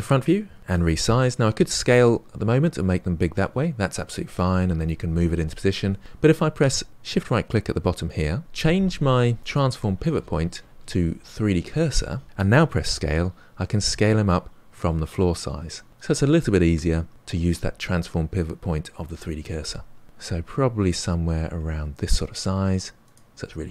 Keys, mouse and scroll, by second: 1.3 s, 7.2 shift+right click, 9.4-12.2 drag, 12.6 s.